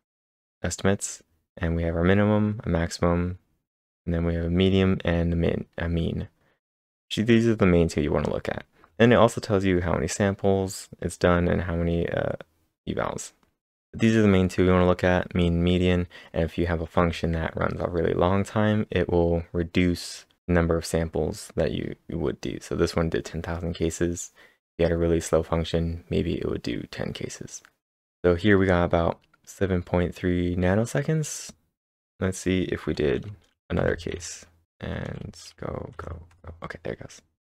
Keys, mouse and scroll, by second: 31.9 click, 31.9-33.5 scroll down 1, 33.8 ctrl+/, 33.9 scroll down 1, 34.6 ctrl+1, 34.6 ctrl+s, 34.6 k, 35.2 ctrl+`, 35.9 Up, 36.3 Return.